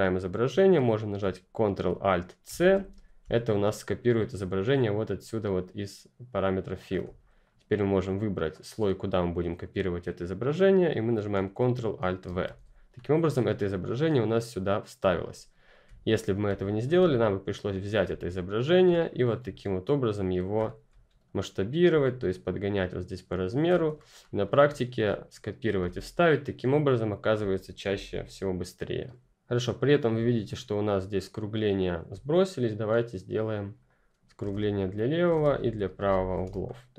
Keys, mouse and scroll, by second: 2.4 ctrl+alt+c, 7.0 ctrl+c, 7.1-8.1 ctrl+scroll up 1, 8.1 ctrl+click, 12.2 ctrl+alt+v, 12.9-13.9 ctrl+scroll up 1, 13.9 ctrl+click, 14.8-15.1 ctrl+scroll down 1, 15.6 ctrl+click, 16.4 ctrl+space, 16.6 ctrl+click, 16.9-17.8 ctrl+scroll down 1, 17.8 ctrl+click, 19.0-19.8 ctrl+scroll up 2, 19.8 click, 20.6-21.8 ctrl+scroll down 2, 21.8 shift+scroll down 1, 22.0 shift+click, 23.9 ctrl+scroll up 1, 24.7-25.7 scroll up 1, 25.7 Delete, 26.7-27.6 ctrl+scroll up 1, 27.6 scroll up 1, 27.8 ctrl+0, 30.1 ctrl+F10, 30.2-31.1 ctrl+scroll up 1, 31.1 ctrl+click, 34.1-35.8 typing, 34.8 click, 35.9 Return, 36.1 click, 36.6-36.9 ctrl+scroll up 1.